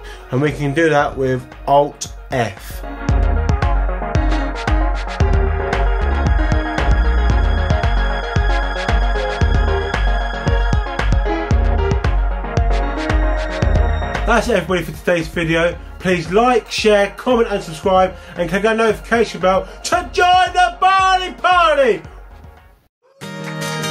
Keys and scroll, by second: 2.4 alt+f.